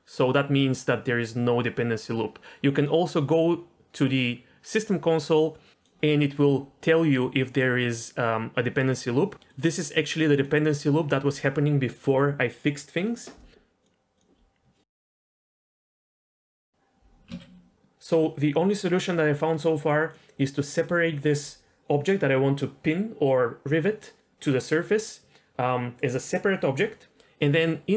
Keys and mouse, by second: 2.8-4.8 drag, 13.9-14.2 drag, 15.8 Tab, 17.4 ctrl+z, 20.1 click, 27.4 click.